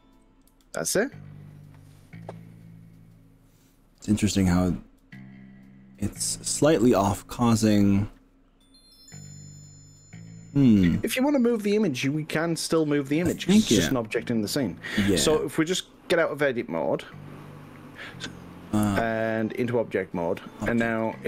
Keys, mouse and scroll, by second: 5.0 click, 16.4 click, 19.4-20.6 drag.